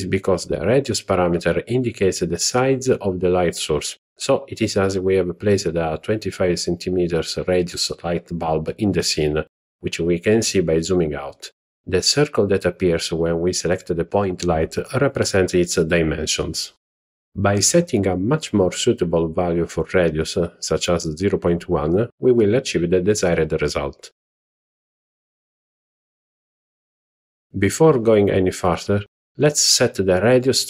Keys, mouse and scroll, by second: 1.4-4.3 scroll down 10, 5.4-8.5 drag, 9.0-9.5 scroll up 1, 9.5-10.0 scroll up 4, 10.3 scroll up 1, 11.9-16.2 drag, 18.4-23.8 drag, 25.1-26.1 scroll up 4, 26.4-26.8 scroll up 1, 26.8-27.5 shift+middle drag, 27.8 scroll down 1.